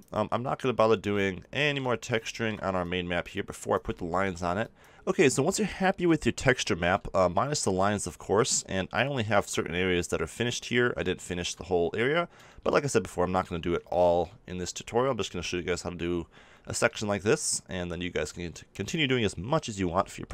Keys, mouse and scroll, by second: 1.2-2.7 middle drag, 2.7-5.0 drag, 6.2-11.4 middle drag, 14.2 middle click, 16.4 middle click.